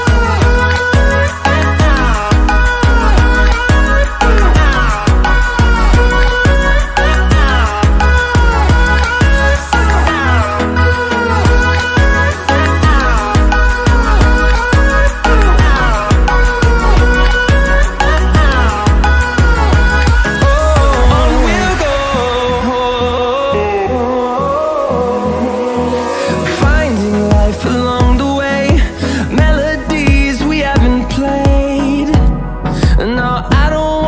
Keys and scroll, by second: 26.7 ctrl+d.